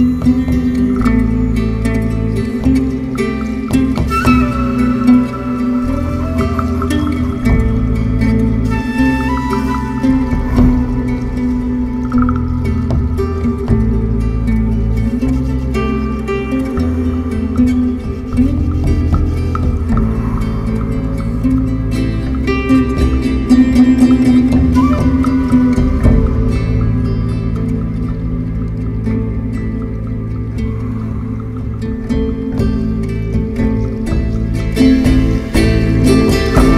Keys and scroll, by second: 13.0 4, 13.7 3, 14.0 2, 14.1 3, 16.3 ctrl+z, 20.8 3, 25.8 3, 27.5 7.